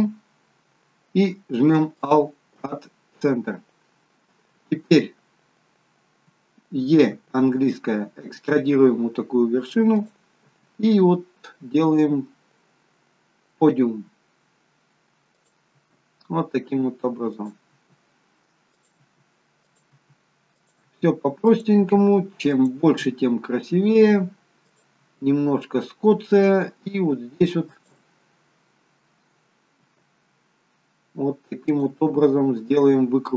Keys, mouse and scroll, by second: 0.3 alt+m, 7.5 e, 10.4 e, 15.7 e, 17.7 e, 19.9 e, 20.8 e, 22.8 e, 25.0 e, 29.8 e, 32.4 e.